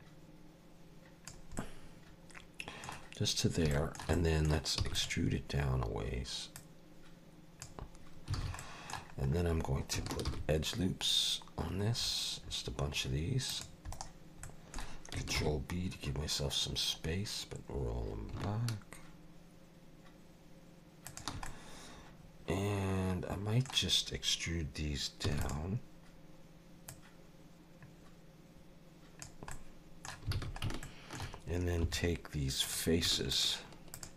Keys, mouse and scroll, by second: 1.6 middle click, 3.7 shift+middle click, 4.1 middle click, 4.8 e, 6.5 click, 8.3 alt+a, 8.6 middle click, 9.3 scroll down 2, 10.3 ctrl+r, 14.4 middle click, 15.4 ctrl+b, 21.4 middle click, 25.3 e, 26.9 click, 29.5 middle click, 30.3 alt+a, 30.8 shift+middle click, 31.8 3, 32.6 click, 33.3 shift+click, 33.9 shift+click.